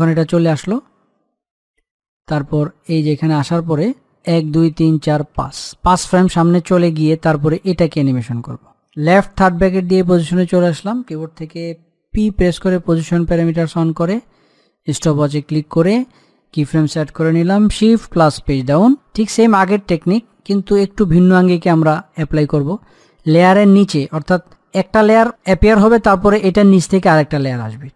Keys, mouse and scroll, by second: 4.5 Page_Down, 7.9 click, 9.7 l, 12.5 p, 15.1 click, 17.9 shift+Num_Lock, 18.1 click, 18.5 shift+Page_Down, 20.3 click, 25.7-27.9 middle drag.